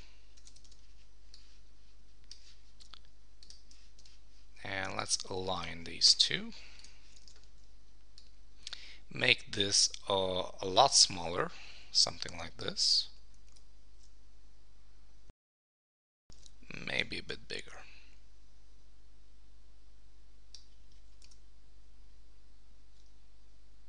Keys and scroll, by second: 7.3 super+t, 13.6 Return, 15.3 shift+super+1, 16.3 super+t, 21.2 Return.